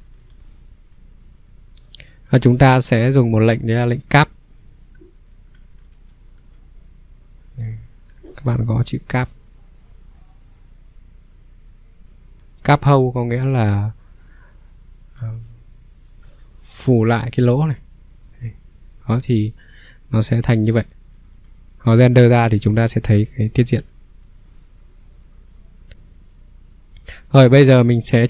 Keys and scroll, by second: 5.3-6.4 typing, 11.0-12.4 typing, 14.9 c, 20.9 q, 22.7 ctrl+q, 22.7 ctrl+3, 23.7 Escape.